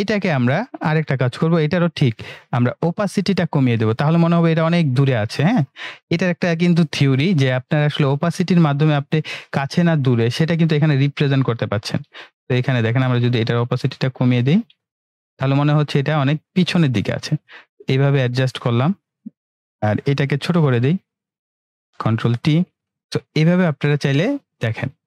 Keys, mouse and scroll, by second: 9.2-10.7 drag, 20.3 ctrl+r, 21.5 click, 22.1 ctrl+t, 23.0-24.5 drag.